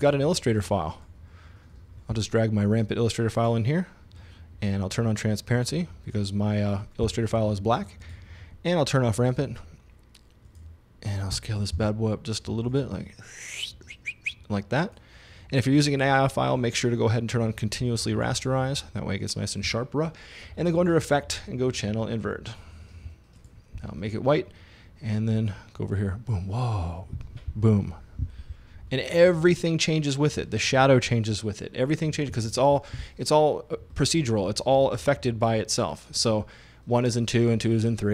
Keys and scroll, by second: 11.8 s.